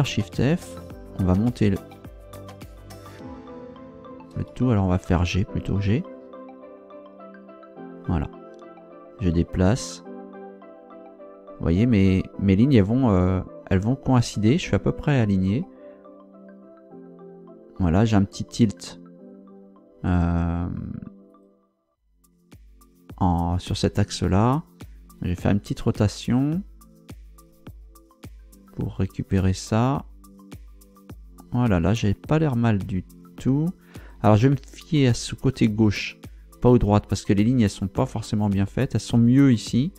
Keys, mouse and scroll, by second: 0.2 shift+f, 0.8 Up, 1.9 Down, 4.3 Return, 5.7 g, 21.3 click, 25.4 r, 33.9 click.